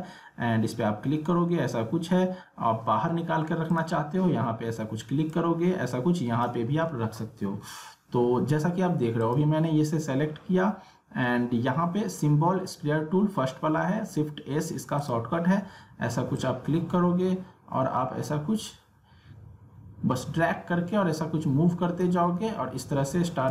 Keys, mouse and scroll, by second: 3.7-9.2 drag, 15.0-23.5 drag.